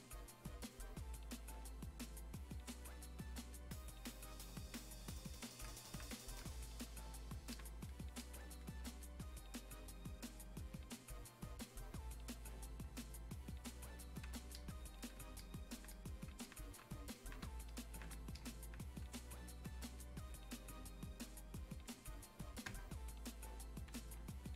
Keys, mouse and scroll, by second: 23.2-24.5 drag.